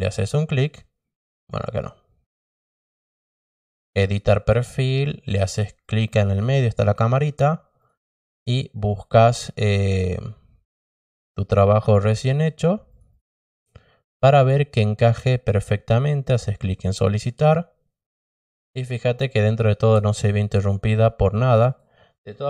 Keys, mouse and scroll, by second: 1.4 click, 5.8 click, 7.7 click, 11.0 click, 12.8 click, 13.1 click, 17.0 click, 21.6 click.